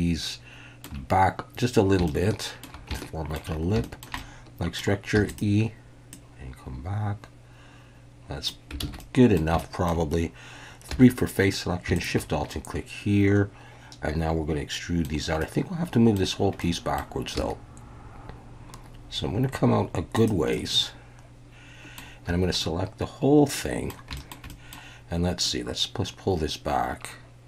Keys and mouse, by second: 2.1 shift+middle click, 3.0 shift+middle click, 3.8 shift+middle click, 4.2 middle click, 5.1 e, 5.3 click, 6.1-8.5 drag, 8.8 alt+a, 9.0 middle click, 9.6 shift+middle click, 10.9 3, 12.5-15.0 middle drag, 15.4 middle click, 16.6 middle click, 17.4 e, 20.1 click, 20.5-22.0 middle drag, 22.3 a, 22.6-23.9 middle drag, 24.1 shift+middle click, 24.5 middle click, 25.4-27.4 drag.